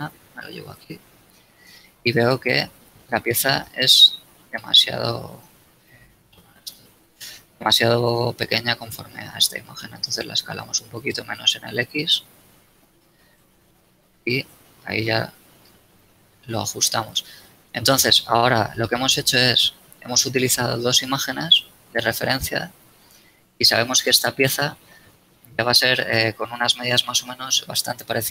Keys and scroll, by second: 0.9 a, 1.9 Tab, 3.3 z, 3.9 Tab, 4.6 a, 8.9 shift+s, 11.3 shift+x, 18.1 z, 23.0 a.